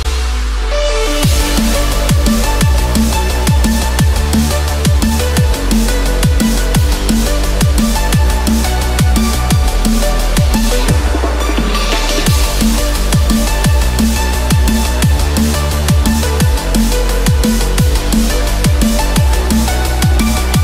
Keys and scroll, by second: 2.3 ctrl+-, 9.6 ctrl+=, 9.7 ctrl+space, 18.5 ctrl+-, 19.5 ctrl+=.